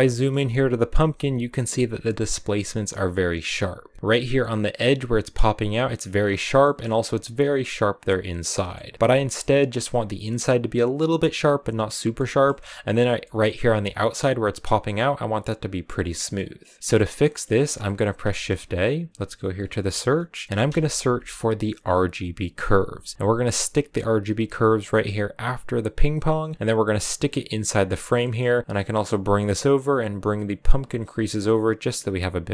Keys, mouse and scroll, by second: 0.0-2.6 shift+middle drag, 2.6-4.2 scroll up 3, 6.4-9.1 shift+middle drag, 9.1-9.7 scroll up 2, 12.0-16.5 shift+middle drag, 21.1 middle click, 26.6 click, 28.6-32.5 drag.